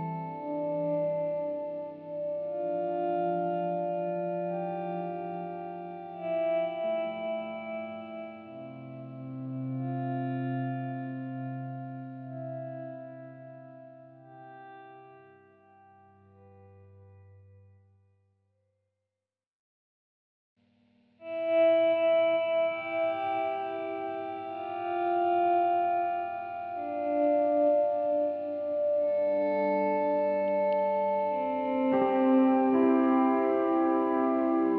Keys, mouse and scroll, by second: 1.2-3.8 scroll up 2, 3.8-5.9 drag, 5.9-7.0 scroll down 4, 7.0-10.5 drag, 12.2 scroll up 3, 12.8-21.4 middle drag, 21.4-21.8 scroll down 1, 21.8-23.7 middle drag, 23.7-26.7 drag, 27.1-30.4 drag, 30.4-34.7 middle drag.